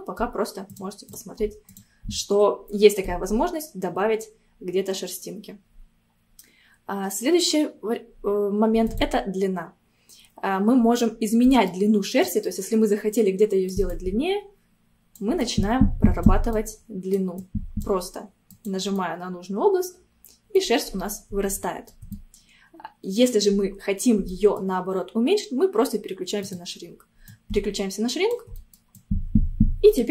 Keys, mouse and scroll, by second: 0.8-2.2 drag, 2.2-5.2 middle drag, 8.9-11.1 drag, 11.1 scroll down 2, 11.5 middle click, 12.3-19.0 drag, 19.0-26.4 middle drag, 26.4 click, 27.3-28.6 drag, 28.6 middle click, 29.0-30.1 drag.